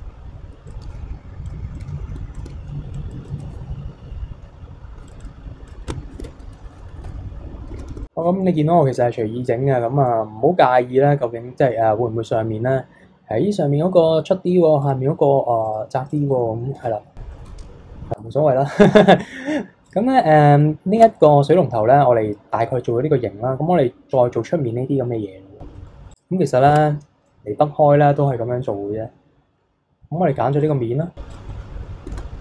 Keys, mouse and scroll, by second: 0.0 click, 0.7 click, 1.5 alt+click, 1.8 middle click, 2.4 alt+shift+click, 3.0 click, 3.4-4.5 middle drag, 4.5-5.1 scroll down 1, 5.1-6.2 drag, 6.2 Tab, 6.4 scroll down 1, 6.6 middle click, 7.1 KP_3, 7.3 scroll up 3, 7.6-8.0 scroll down 1, 8.0-13.1 shift+middle drag, 14.8 click, 15.6 click, 16.1 click, 16.4-16.7 middle drag, 16.7 Tab, 17.0-17.3 scroll down 3, 17.3 middle click, 17.6 w, 18.2 KP_1, 18.5 KP_3, 18.7-19.1 scroll up 4, 19.1-19.8 scroll down 2, 19.8 click, 20.6-21.0 middle drag, 21.0 Tab, 21.2-24.3 middle drag, 25.6 scroll down 2, 25.8-26.1 middle drag, 26.1 click, 26.7 Tab, 27.3-27.9 middle drag, 27.9-28.9 scroll up 2, 28.9-30.6 scroll up 1, 30.6 click, 31.3 click, 31.5 middle click, 32.1 shift+d.